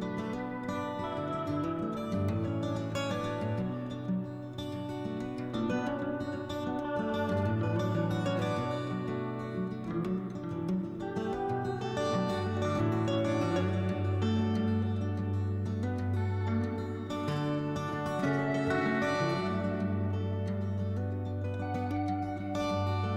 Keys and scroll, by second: 1.0 s, 2.0 s, 4.0 3, 6.7 s, 8.1-9.0 typing, 10.2-11.7 typing, 15.1 3, 17.8 s, 21.5 5.